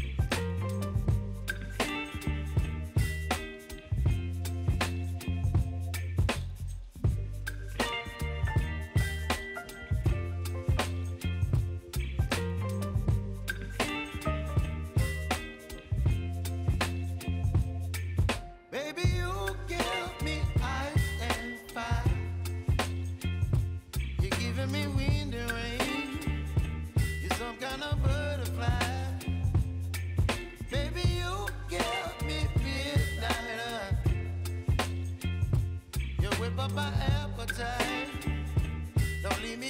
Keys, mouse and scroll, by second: 1.1 click, 2.3 space, 4.4 click, 5.7 space, 8.6 -, 9.2 click, 10.1 s, 10.8 click, 11.8 =, 13.1 click, 15.0 j, 16.1 click, 18.6-22.0 drag, 23.2 s, 23.9 click, 24.7 k, 25.9 click, 26.7 j, 28.0 click, 29.9 click, 30.8 F9, 31.5 click, 34.4-37.2 drag.